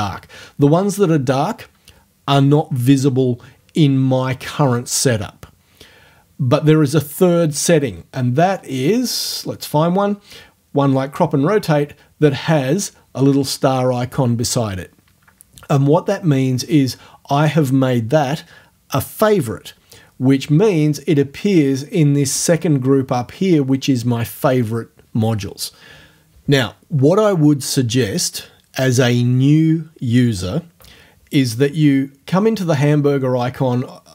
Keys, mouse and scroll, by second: 7.9-9.7 scroll down 4.